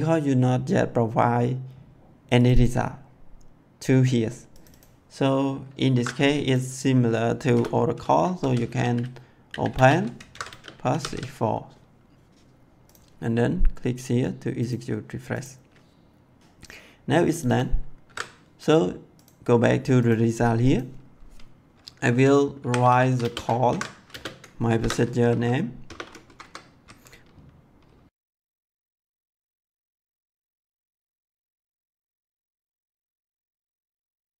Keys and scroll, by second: 5.9 ctrl+c, 7.5 Return, 8.1-11.5 typing, 10.2 ctrl+v, 18.0 ctrl+c, 22.3-25.7 typing, 23.6 ctrl+v, 26.2 Left, 28.6-29.6 typing, 30.9 Left, 33.3 Right, 33.5 ', 34.1 Left.